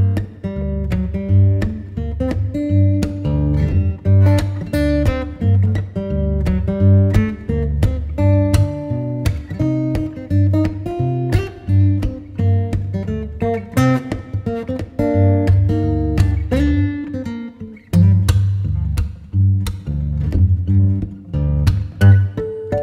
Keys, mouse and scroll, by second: 11.9-12.3 scroll down 1, 12.3-12.6 scroll up 1, 12.6 right click, 12.7 click, 14.1 click.